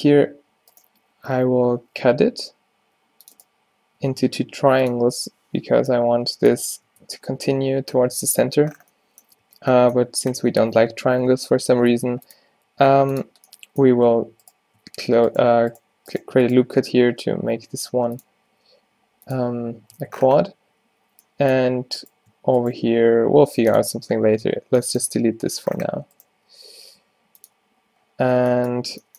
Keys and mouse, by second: 0.1 ctrl+r, 1.9 k, 4.1 k, 8.0 middle click, 8.1 Tab, 8.7 Tab, 9.5 a, 11.9 ctrl+r, 14.5 click, 16.0 g, 16.7 alt+g, 17.3 g, 18.6 g, 19.6 Tab, 20.0 Tab, 22.1 click, 22.9 shift+x, 24.0 Tab, 24.5 Tab, 26.4 g.